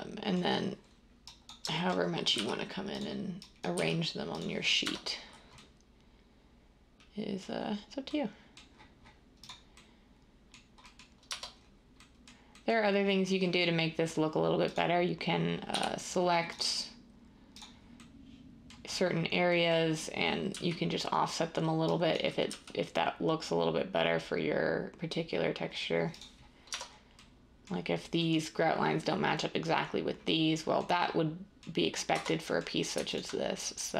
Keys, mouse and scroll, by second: 2.3 g, 3.7 g, 4.8 Tab, 11.2 Tab, 15.7 i, 20.5 g, 22.5 g, 26.7 Tab, 32.1 Tab.